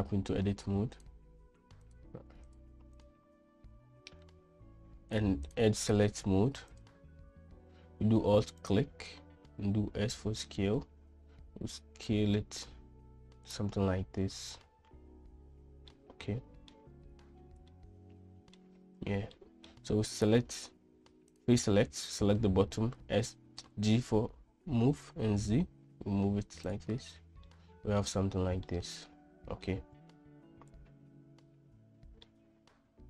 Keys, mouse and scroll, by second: 0.1 Tab, 2.2 alt+click, 3.3 click, 5.8 click, 7.0 click, 10.1 s, 16.2 middle click, 18.1 middle click, 19.7 middle click, 20.5 right click, 21.7 right click, 23.3 s, 27.8 middle click, 29.1 middle click, 31.4 Tab, 32.6-33.0 middle drag.